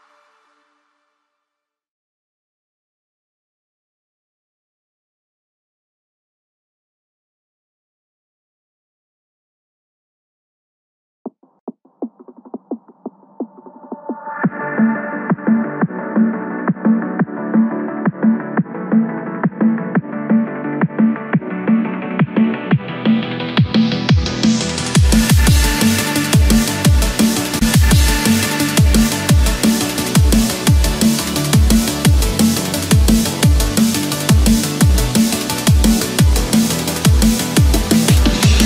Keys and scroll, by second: 0.3 ctrl+z, 4.0 ctrl+z, 10.9 Return, 11.6 Escape, 15.2 Return, 16.8 ctrl+z, 17.5 Escape, 21.2 Return, 21.8 Escape, 24.8 Return, 25.3 Escape, 28.3 Return, 28.9 Escape, 32.0 Return, 34.8 Escape, 35.7 Return, 36.4 Escape, 37.1 ctrl+-, 37.4 ctrl+0.